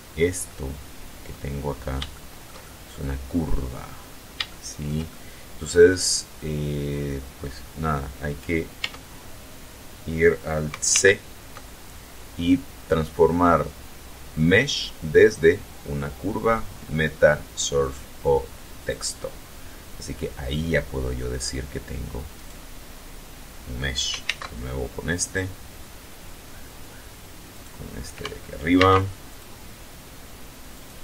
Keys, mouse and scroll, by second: 0.3-0.9 scroll up 1, 1.3-1.7 scroll down 1, 2.0-3.7 shift+middle drag, 3.9 scroll down 1, 4.3 shift+middle click, 4.9 shift+middle click, 5.7-6.2 scroll up 1, 6.6 scroll down 1, 8.6 Tab, 10.7 alt+c, 18.6 click, 20.3 middle click, 22.2 right click, 24.0 alt+c, 24.9 click, 27.3 right click, 28.6 alt+c, 29.1 alt+click, 30.5 right click.